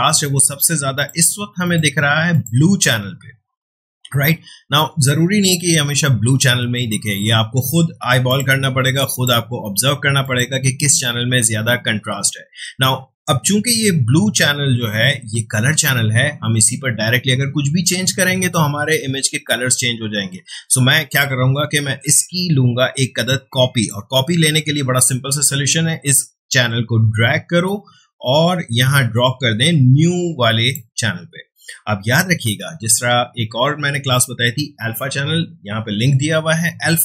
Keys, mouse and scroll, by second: 0.9 click, 8.3 click, 22.3-33.2 drag.